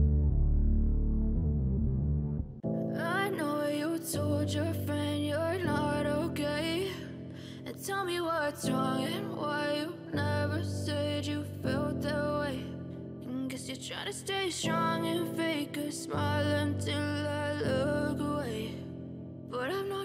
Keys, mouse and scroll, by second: 10.0 scroll down 1, 11.2-12.1 scroll up 19, 12.6 scroll up 1, 18.9 ctrl+j.